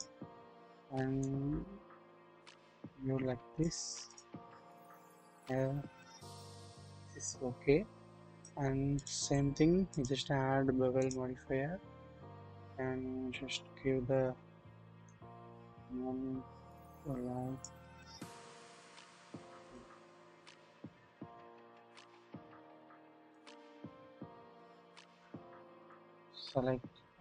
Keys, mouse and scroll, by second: 1.2-3.6 drag, 4.8-8.5 drag, 8.9 click, 11.0 click, 15.0-17.6 drag, 20.0-20.9 scroll down 1, 20.9-23.3 drag, 24.5 scroll down 1, 24.7-25.1 shift+middle drag, 25.5-25.8 scroll up 1, 26.2-26.6 scroll down 1.